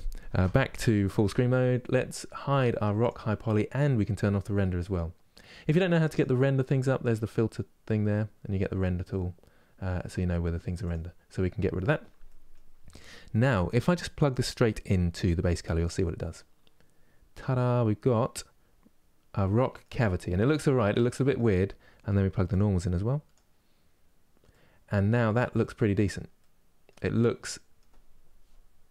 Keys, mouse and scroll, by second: 0.0 ctrl+space, 2.7-12.0 drag, 12.0-15.5 middle drag, 15.5 click, 16.6-19.2 scroll up 3, 19.2 middle click, 19.7 scroll down 2, 20.1-23.0 middle drag, 23.0 click, 24.2-28.9 middle drag.